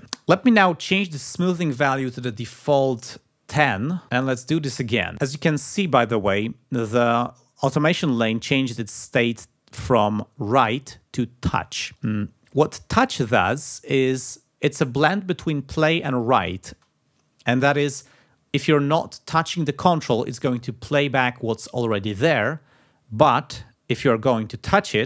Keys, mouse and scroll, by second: 0.0 ctrl+scroll down 2, 1.6 click, 2.4-3.4 typing, 4.5 click, 10.5 click, 12.1 click, 12.6 click, 15.7 click, 17.3 space.